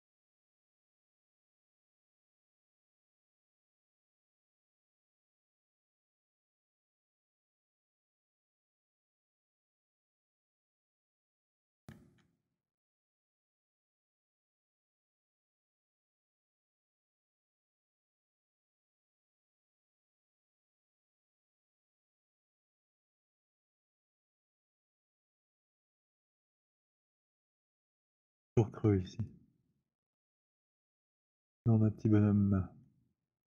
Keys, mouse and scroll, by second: 0.6 alt+click, 0.9 alt+middle click, 2.3 click, 3.7-7.5 typing, 5.8 middle click, 7.5 middle click, 7.8 click, 9.0 z, 9.8 z, 10.5 middle click, 12.1-17.7 typing, 14.2 middle click, 17.7 middle click, 18.7 click, 21.8 click, 24.0 click, 29.8 alt+click, 30.4 alt+middle click, 32.2 alt+middle click.